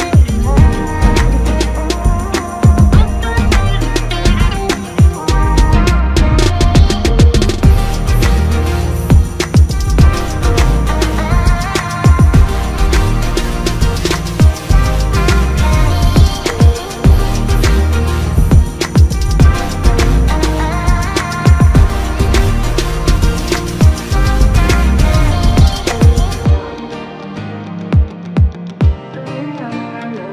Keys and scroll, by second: 1.7 typing, 3.0 typing, 9.7 ctrl+KP_Add, 10.5 ctrl+space, 14.0 shift+space, 17.7 ctrl+KP_Subtract, 18.3 space, 22.5 ctrl+KP_Subtract, 23.1 space, 28.2 shift+Left.